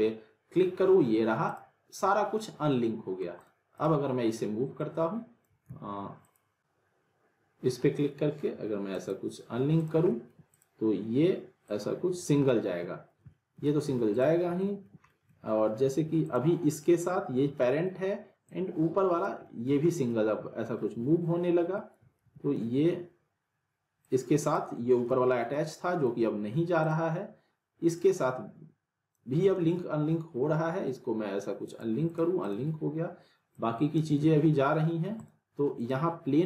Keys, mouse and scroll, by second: 1.5 click, 2.6-3.2 alt+middle click, 3.4 click, 5.6 ctrl+z, 6.2 click, 6.2 click, 6.6-8.9 alt+middle drag, 8.9 click, 10.1 alt+middle click, 10.5 click, 12.5-13.1 alt+middle click, 13.1 scroll down 1, 13.3 alt+middle click, 13.9 ctrl+z, 14.1 click, 14.4 scroll up 1, 14.6 alt+middle click, 15.1 middle click, 16.2 click, 17.6 alt+middle click, 18.4-19.4 click, 19.4 middle click, 19.9 scroll down 1, 20.1-20.7 alt+middle click, 20.8 scroll up 1, 21.1-22.0 alt+middle click, 22.2 ctrl+z, 24.0-24.6 click, 25.1 ctrl+z, 25.5-26.1 alt+middle drag, 26.8-29.2 drag, 29.6 ctrl+z, 31.7 click, 34.2 z, 34.8 alt+middle click, 35.2 click.